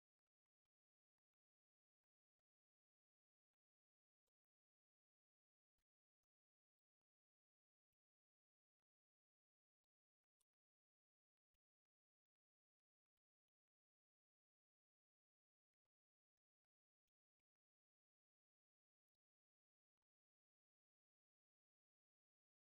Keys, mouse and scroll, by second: 0.2 alt+middle click, 3.7 shift+click, 6.7 click, 8.6 click, 9.1 click, 11.2 click, 11.5 click, 12.8 right click, 13.4 click, 13.8 alt+middle click, 14.8 right click, 16.0 click, 17.8 click, 19.1 click, 20.1 s, 20.7 s, 22.3 click.